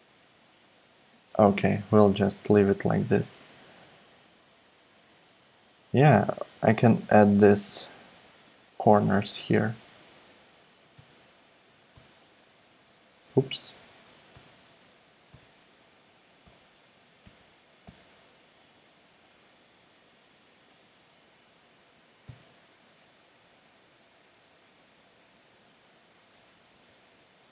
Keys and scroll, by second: 10.9 super+c, 11.9 alt+s, 13.3 super+z, 14.3 super+d, 15.3 alt+s, 16.4 Up, 16.7 Up, 17.2 Down, 17.4 Down, 17.9 Down, 18.0 Down, 22.2 super+d, 23.5 shift+Right, 25.3 shift+Right, 25.7 shift+Right, 26.3 Left, 26.5 Left, 26.7 Left, 26.9 Left, 27.0 Left.